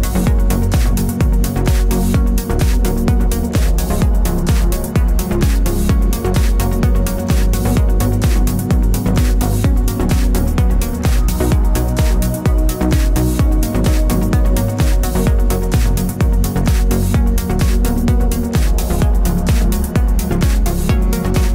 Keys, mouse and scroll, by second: 1.6 Tab, 3.3 click, 8.1-14.5 middle drag, 9.2 z, 12.7 Tab, 14.5 click, 15.4 Tab, 16.1-21.5 middle drag, 16.5 ctrl+z.